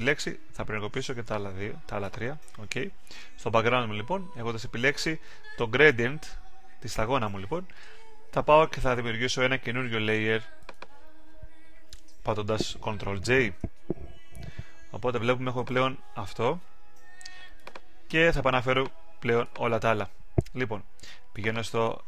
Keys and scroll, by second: 13.4 super+j.